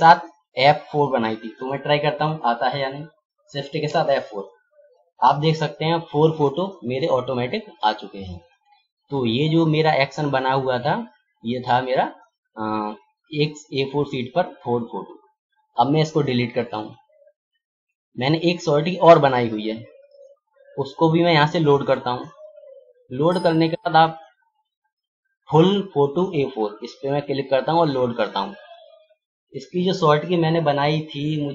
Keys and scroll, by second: 3.8 shift+F4.